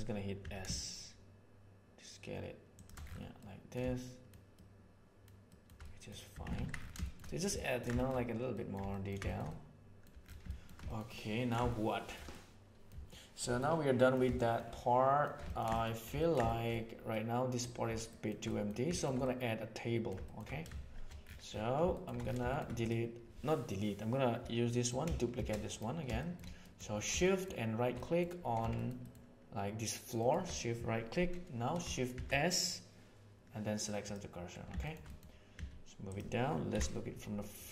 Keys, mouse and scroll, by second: 0.4 s, 3.4 middle click, 3.9 shift+middle click, 4.5 shift+middle click, 5.5 shift+middle click, 5.8 middle click, 6.3 Tab, 6.5 alt+a, 7.0-7.3 shift+middle drag, 7.5 ctrl+middle drag, 8.0 shift+middle click, 8.5 middle click, 8.9 ctrl+middle click, 9.2 shift+middle click, 9.4-9.9 middle drag, 10.4 shift+middle drag, 10.8 ctrl+middle click, 11.1-11.5 ctrl+middle drag, 11.7-12.1 shift+middle drag, 12.3-13.3 middle drag, 13.6-14.1 middle drag, 14.3 shift+middle drag, 14.7-15.3 shift+middle drag, 15.4 ctrl+middle click, 16.2 ctrl+middle click, 16.4 shift+middle click, 17.1 middle click, 18.1 shift+middle click, 18.4 middle click, 19.2 middle click, 20.2 shift+middle click, 24.6 click, 25.4 shift+d, 26.2 shift+middle click, 26.6 middle drag, 27.2 shift+middle drag, 27.9 middle drag, 28.8 shift+middle click, 29.0 shift+middle click, 30.2 shift+click, 32.1 shift+s, 34.8-35.1 shift+middle drag, 35.5 s, 36.7 KP_1.